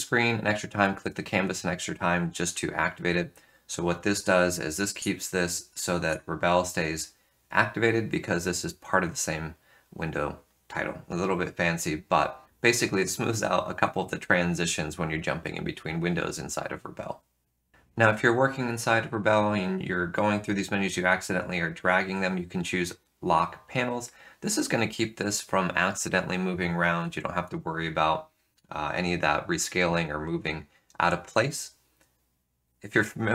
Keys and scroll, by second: 4.8 F3, 6.0 F3.